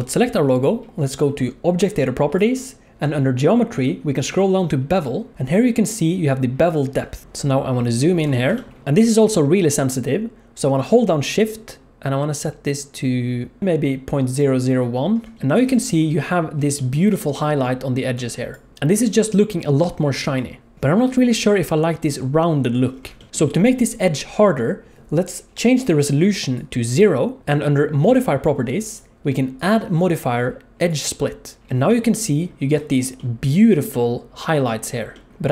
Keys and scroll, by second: 15.7 alt+a, 17.9-18.9 d, 20.2 d, 20.7 alt+a.